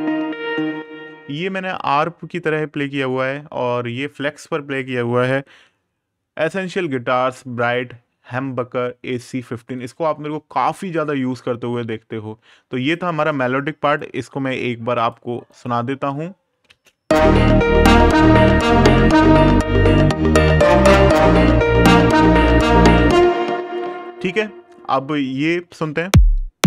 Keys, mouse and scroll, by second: 1.5 click, 5.4 super+KP_Add, 8.3 super+KP_Subtract, 9.5 click, 13.0 click, 15.7-16.1 scroll up 1, 16.4 space, 17.1-18.0 scroll up 1, 18.2 scroll down 1, 18.8-19.1 scroll up 1, 19.1-19.8 scroll down 1, 20.1-20.9 scroll up 1, 22.5 space, 23.8 right click, 25.4 space.